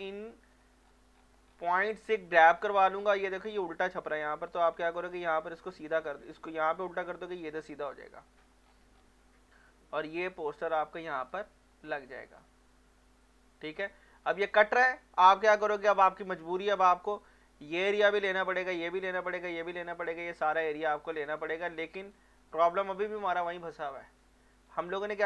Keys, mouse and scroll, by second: 0.4 scroll up 1, 0.8 scroll down 1, 1.6 scroll down 1, 3.5 alt+middle click, 4.7 alt+middle click, 5.5-8.2 drag, 8.2 scroll up 1, 8.7 scroll down 1, 10.1-12.1 drag, 12.1-13.6 drag, 13.6 scroll down 1, 14.5 scroll up 1, 15.9 click, 23.1 scroll down 1, 23.3 scroll up 1, 24.3 alt+middle click, 24.6 scroll down 1.